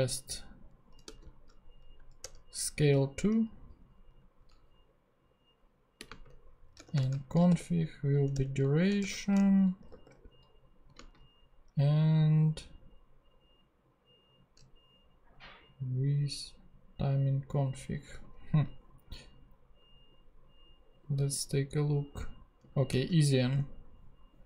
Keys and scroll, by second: 0.7-1.6 typing, 2.3 Return, 5.9-7.9 typing, 8.3 Return, 8.8 shift+Return, 9.0-10.9 typing, 22.9 super+c, 23.4 ctrl+super+Tab, 24.1 ctrl+Tab.